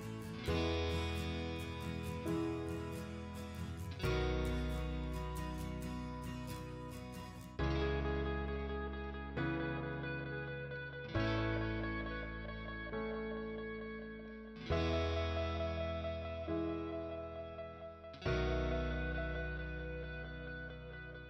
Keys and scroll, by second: 2.5 m, 2.6 space, 17.2 p, 17.6 space, 20.7 F8.